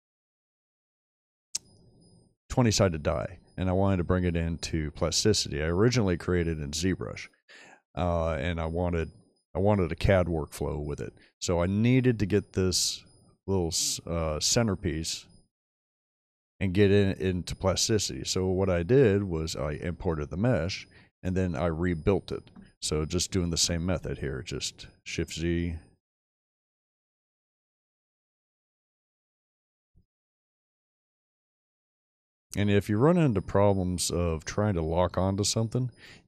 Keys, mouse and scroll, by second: 1.8-3.9 middle drag, 3.9-4.8 scroll down 2, 4.8-5.6 scroll down 1, 8.0-8.4 middle drag, 8.8 middle click, 11.4-12.0 middle drag, 19.2-20.4 middle drag, 20.8-21.6 scroll up 2, 21.6-22.5 shift+middle drag, 21.6-22.1 scroll down 2, 23.5 shift+z, 24.9 drag, 27.0 click, 28.5 click.